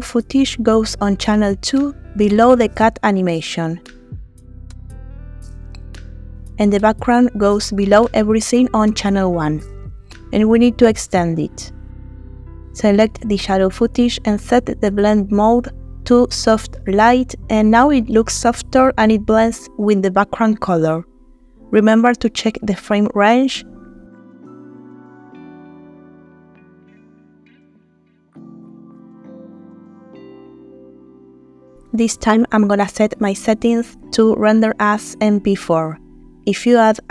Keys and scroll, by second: 3.2 shift+a, 28.9 Home, 29.0 Caps_Lock, 29.2-30.8 typing.